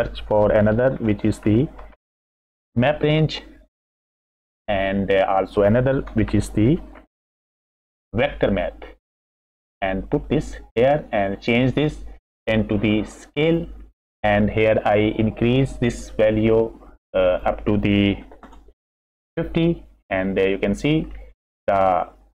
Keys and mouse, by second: 1.0 shift+a, 5.6 click, 6.3 shift+a, 10.3-11.1 drag, 11.7-13.5 drag, 16.2 click, 17.4-19.2 middle drag, 21.4 middle click.